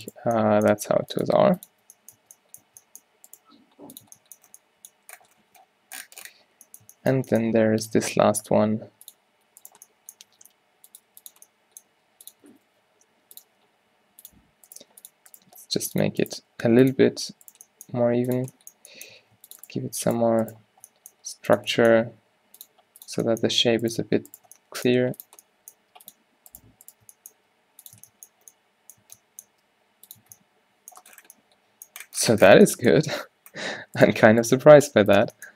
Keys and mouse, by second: 1.0 r, 1.3 g, 1.8 z, 2.3 Tab, 2.7 Tab, 4.2 Tab, 4.2 g, 8.0 Tab, 9.2 click, 9.7-11.3 drag, 10.4 e, 11.1 g, 12.3 g, 12.5 s, 14.8 click, 14.9 g, 15.5 g, 16.4 g, 16.6 click, 18.1 click, 18.1 g, 19.3 ctrl+r, 21.3 g, 22.5 r, 22.8 g, 25.2 g, 25.9 g, 27.7 g, 28.1 Tab, 30.2 Tab, 30.2 g, 30.3 Tab, 33.3 Tab, 34.9 g.